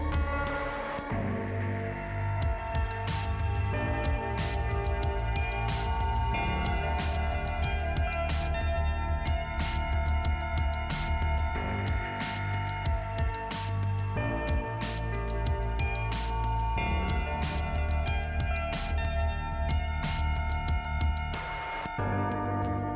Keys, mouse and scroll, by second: 1.0 click, 2.6 click, 3.2 click, 6.4-7.0 scroll down 2, 7.1 scroll down 1, 9.7 ', 12.9 click, 14.6 click, 15.1 click, 18.3 alt+k, 19.3-19.7 scroll up 2, 21.1 p, 21.5 scroll down 2.